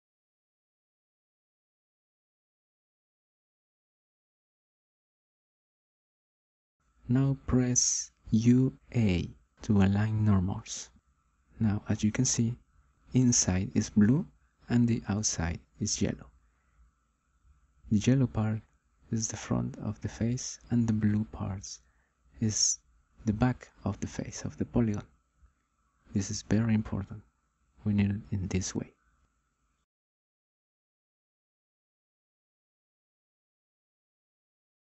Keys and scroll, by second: 7.0 u, 8.1 a, 15.1 ctrl+a.